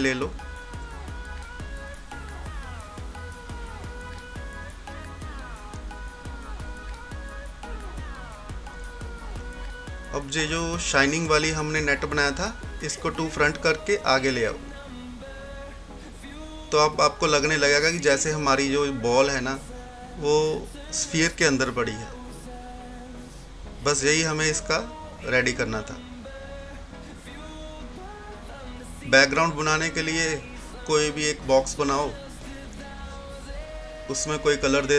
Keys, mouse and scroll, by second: 3.2 scroll up 1, 5.3-9.3 drag, 6.3 typing, 10.3 click, 10.7 typing, 10.9 right click, 11.1 right click, 12.9 click, 17.3 scroll down 1, 18.3 scroll up 1, 19.7 typing, 21.0 scroll down 1, 21.0 typing, 24.1-32.8 drag, 31.2 typing, 34.6 click.